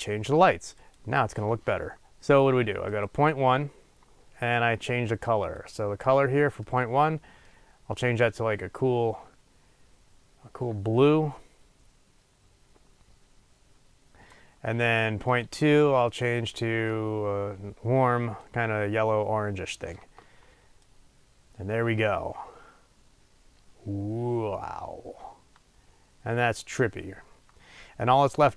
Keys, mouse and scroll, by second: 0.7-3.0 drag, 15.5 click, 20.9-28.5 drag.